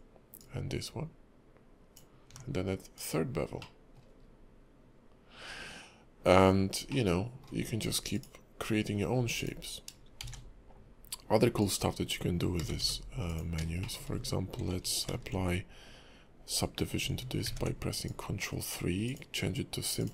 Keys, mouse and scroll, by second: 0.4 ctrl+click, 2.9 click, 3.6 middle click, 4.1-6.0 scroll up 2, 6.4-6.9 scroll down 3, 6.9 middle click, 7.6-8.1 scroll down 2, 8.1 click, 8.6-9.2 scroll down 1, 9.2-9.6 scroll down 1, 9.2 x, 10.2 shift+a, 12.0 scroll down 1, 12.6 g, 13.6-14.8 scroll up 4, 13.8 shift+middle click, 15.1 ctrl+3, 16.6 scroll up 2, 17.4 ctrl+`.